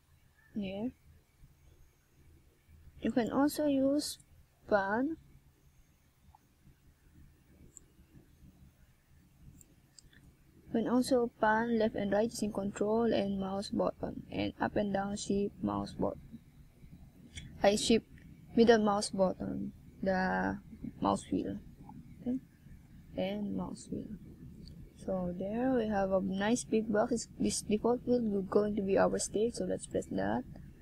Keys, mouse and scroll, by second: 2.2 Tab, 3.1 right click, 4.0 shift+right click, 5.5 right click, 6.5 shift+right click, 14.2 x, 19.4 right click, 20.2 shift+right click, 21.7 middle click, 26.1 Tab, 26.8 Tab.